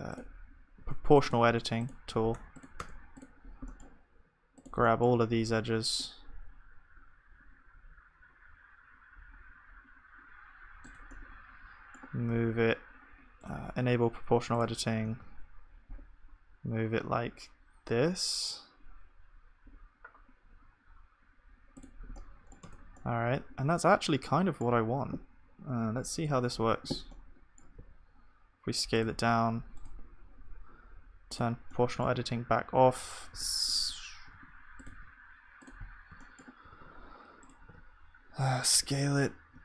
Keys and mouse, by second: 0.8 Tab, 1.5 Tab, 2.3 Tab, 2.8 Tab, 5.5 c, 15.1-18.4 middle drag, 15.1 g, 22.7 Tab, 22.7-26.1 middle drag.